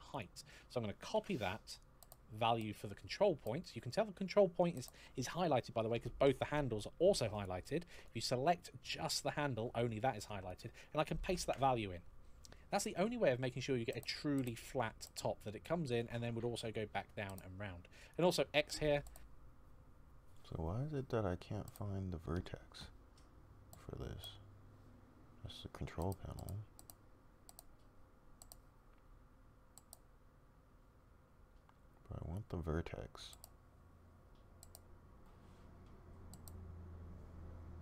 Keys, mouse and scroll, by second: 0.9 ctrl+c, 7.1 click, 10.2 click, 11.0 ctrl+v, 17.9 click.